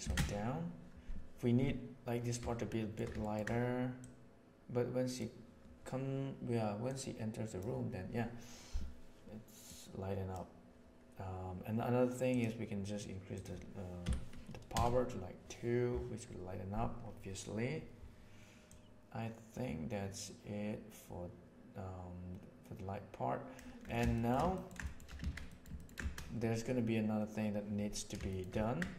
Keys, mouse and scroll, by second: 2.6 shift+middle click, 2.8 ctrl+shift+space, 3.2 ctrl+middle click, 4.0-5.1 drag, 6.8-7.6 drag, 9.6-10.3 drag, 12.2 click, 13.3-16.0 drag, 18.6-23.5 drag, 24.1 shift+middle click, 24.5 ctrl+middle click, 24.8 shift+middle click, 25.2 alt+a, 25.4 middle click, 25.7 middle click, 28.2 shift+middle click.